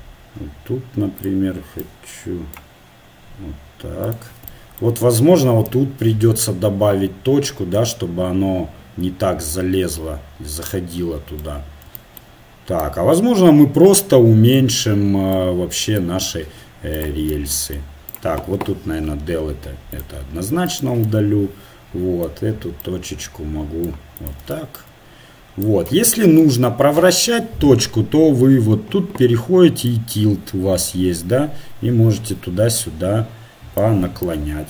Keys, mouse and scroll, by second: 1.8-3.7 right drag, 4.6 middle click, 5.4-7.1 middle drag, 7.5 middle click, 8.7 middle click, 9.7 middle click, 11.6 middle click, 13.9-16.6 middle drag, 16.9 right click, 19.0 Delete, 20.7 right click, 21.4 middle click, 25.6-27.4 right drag, 29.8-31.7 middle drag, 34.2 middle click.